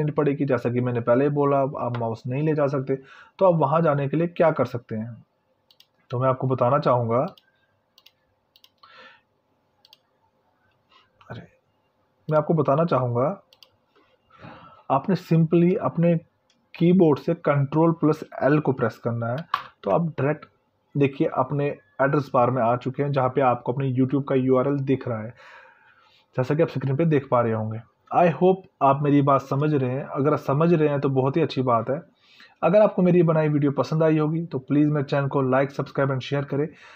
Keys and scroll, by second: 17.4 ctrl+l.